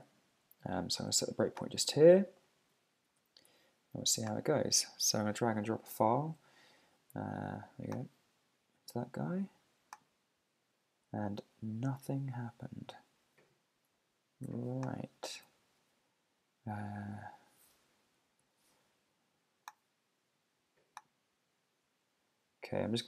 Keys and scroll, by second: 3.1 super+`, 5.2 super+Tab, 12.4 super+`, 15.3 super+`, 17.7 super+Tab.